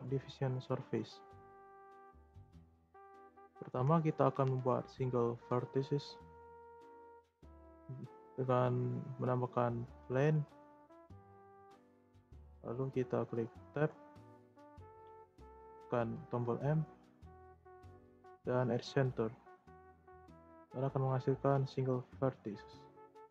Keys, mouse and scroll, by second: 3.2 shift+scroll up 1, 3.2-6.7 shift+middle drag, 6.7 shift+a, 10.6-12.1 scroll up 5, 10.6-10.9 middle drag, 11.3-11.7 shift+middle drag, 12.1-13.6 middle drag, 13.6 Tab, 16.1 m, 19.4 Tab, 19.9-20.7 scroll down 1, 20.7-22.9 scroll down 1.